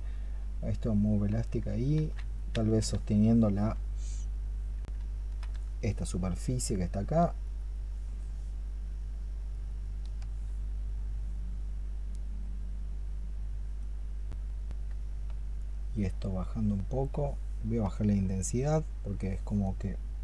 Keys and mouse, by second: 1.8 ctrl+z, 4.6 double click, 5.6 ctrl+click, 7.1 ctrl+click, 8.9 ctrl+click, 9.4 ctrl+click.